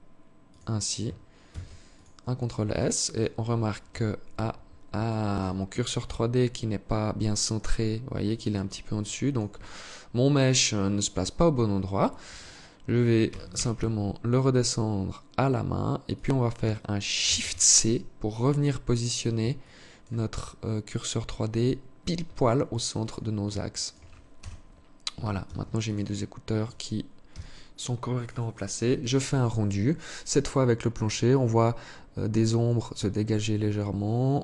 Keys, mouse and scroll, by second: 0.8 ctrl+s, 2.0 right click, 2.4 right click, 3.2 KP_1, 4.4 alt+shift+click, 5.0-6.0 scroll up 6, 7.4-8.4 scroll up 3, 8.4 alt+shift+click, 12.6 g, 16.6 shift+c, 17.6-18.2 scroll up 6, 18.9 alt+shift+click, 19.8-20.4 scroll up 3, 20.7 scroll down 1, 21.8 alt+click, 22.8 alt+shift+click, 23.7 KP_0, 24.8 ctrl+s.